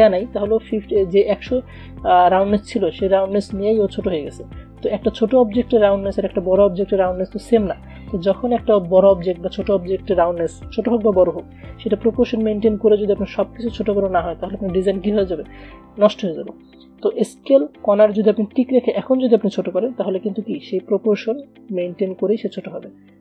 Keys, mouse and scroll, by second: 3.5-8.3 alt+drag, 8.3 ctrl+shift+z, 18.5-19.9 shift+drag, 21.6-22.8 alt+shift+drag.